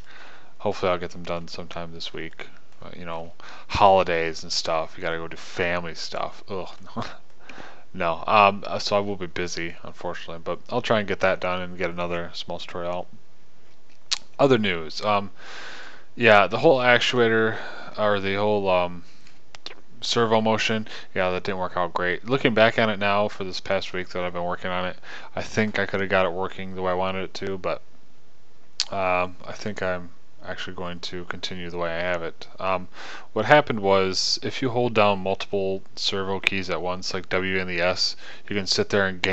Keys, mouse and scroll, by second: 12.2-39.3 drag.